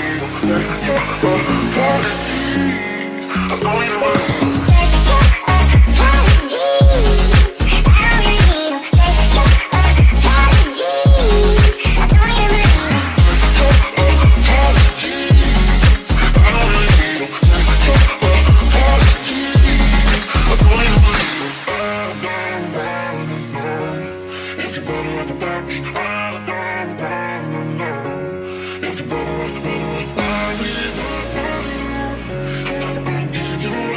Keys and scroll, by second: 0.0-10.2 typing, 0.4 Return, 11.2 ctrl+s, 11.5-13.7 typing, 19.4 Escape, 19.6-24.5 typing, 22.6 Escape, 27.2-30.0 typing, 31.2 d.